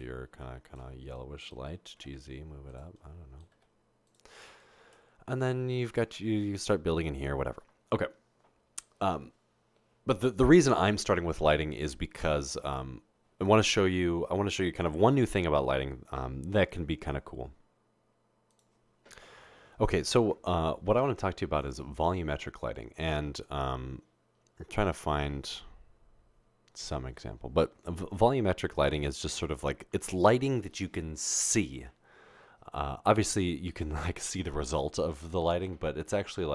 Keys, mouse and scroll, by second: 0.0 typing, 1.7-2.4 typing, 3.5 typing, 5.2 typing.